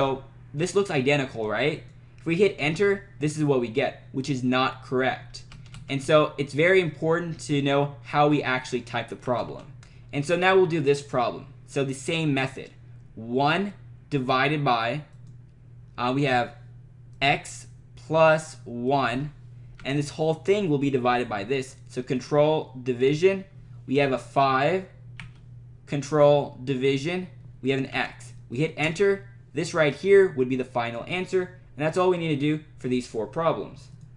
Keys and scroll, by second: 2.6 Return, 5.4 Up, 9.3 Down, 13.5 1, 15.1 /, 17.1 x, 18.2 +, 18.9 1, 19.7 Right, 25.2 5, 27.9 x, 28.8 Return.